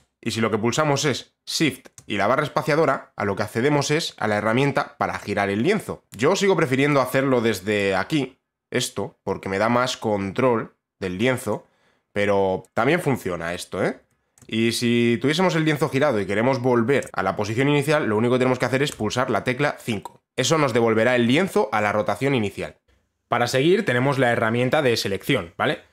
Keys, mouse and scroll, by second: 6.0 shift+click, 6.0 right click, 6.5 click, 7.0 b, 7.4 right click, 11.1 click, 12.3 click, 14.5-16.5 click, 16.5 shift+click, 16.7-18.5 shift+click, 18.5 5.